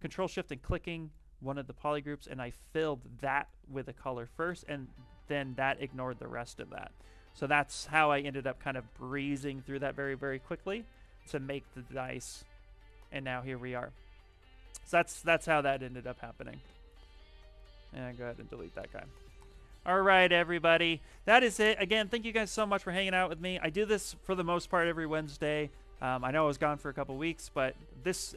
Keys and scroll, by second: 2.5 shift+f.